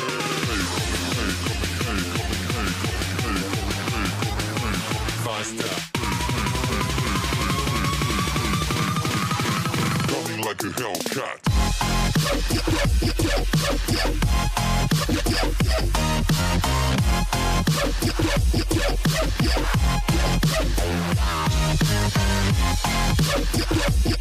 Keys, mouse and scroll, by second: 1.0 click, 15.3-15.8 scroll up 3, 16.5-17.8 drag, 17.8-19.2 scroll down 3, 19.2-19.6 scroll down 2, 19.6-20.0 scroll up 6, 20.4-21.5 scroll down 1, 21.5 click.